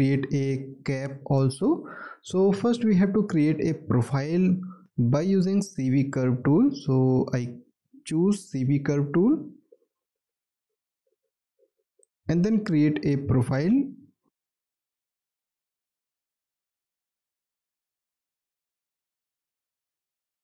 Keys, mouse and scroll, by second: 2.6 alt+middle click, 3.8 alt+middle click, 4.7 alt+middle click, 5.2 alt+middle click, 6.0 alt+scroll up 1, 7.3 alt+middle click, 19.5 double click.